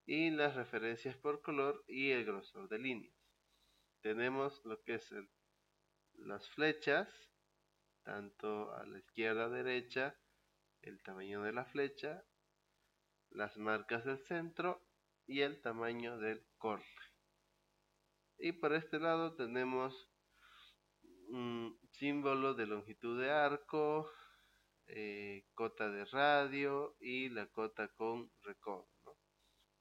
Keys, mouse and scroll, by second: 4.5 click.